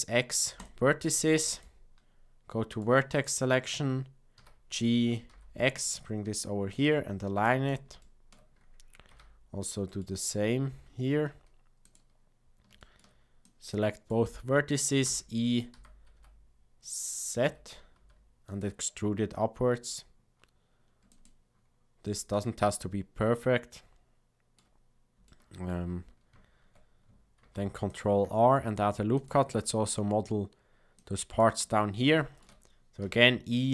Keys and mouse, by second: 1.5 click, 2.6 click, 3.3 click, 4.3 g, 7.4 click, 8.0 shift+middle click, 9.0 g, 12.8 shift+middle click, 13.5 click, 15.0 e, 22.3-24.5 shift+middle drag, 25.2 shift+middle click, 27.3 ctrl+r, 30.9 click, 32.0 shift+middle click, 33.0 e.